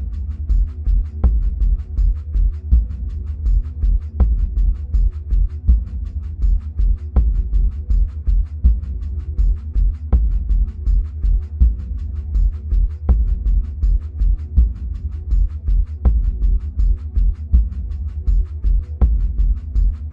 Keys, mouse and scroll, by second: 0.0-6.6 drag, 6.6-9.1 middle drag, 7.2-8.4 scroll down 2, 8.4-9.1 scroll down 1, 9.1-10.8 scroll up 1, 13.3 click, 14.1 shift+middle click, 18.1 click, 19.2-20.1 scroll up 1.